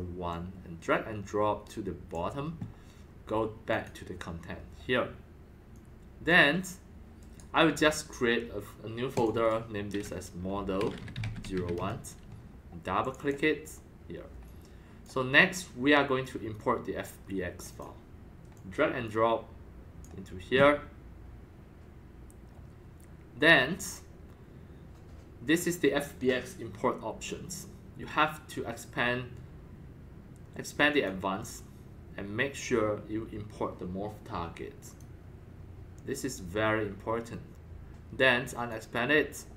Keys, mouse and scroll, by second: 0.3-2.1 drag, 3.7 click, 5.7 click, 7.2 right click, 9.1 click, 10.5-12.0 typing, 13.0 click, 13.1 click, 14.4 click, 15.6 click, 16.6 click, 17.7 click, 18.5-20.0 drag, 22.6-25.1 drag, 30.9 click, 31.1-35.0 drag, 38.6 click.